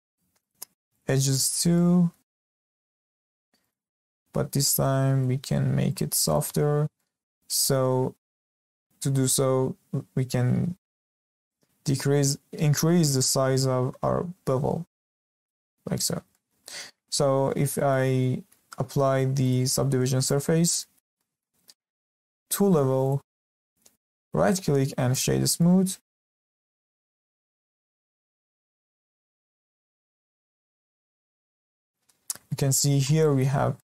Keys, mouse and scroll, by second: 0.4 alt+shift+click, 0.9 alt+shift+click, 1.3-2.3 shift+middle drag, 2.3 scroll up 1, 2.5-3.5 shift+middle drag, 3.5 alt+shift+click, 4.0 alt+shift+click, 4.4 middle click, 4.4 scroll down 2, 4.6-5.8 middle drag, 5.8 alt+shift+click, 6.2 alt+shift+click, 6.6-6.9 scroll up 3, 6.9 shift+middle drag, 9.9 middle click, 10.8 ctrl+b, 15.9-16.3 scroll down 2, 16.3-17.2 shift+middle drag, 17.2 Tab, 17.5 scroll down 2, 17.7-19.4 shift+middle drag, 19.4-20.8 drag, 20.8-23.0 shift+middle drag, 23.0-24.2 drag, 24.2-25.5 right drag, 25.5-28.4 middle drag, 28.4 scroll up 1, 28.7 shift+middle click, 29.4 scroll up 1, 29.6-32.2 shift+middle drag, 32.2 scroll up 1, 32.5-32.9 shift+middle drag, 32.9-33.2 scroll up 1, 33.2-33.6 shift+middle drag, 33.6 scroll up 2, 33.7-33.9 shift+middle drag.